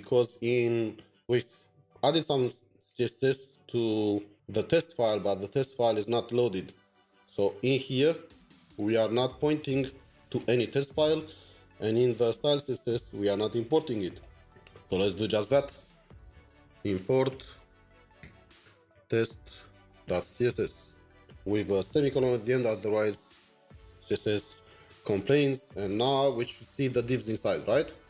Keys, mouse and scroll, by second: 16.5-20.8 typing, 25.9 typing.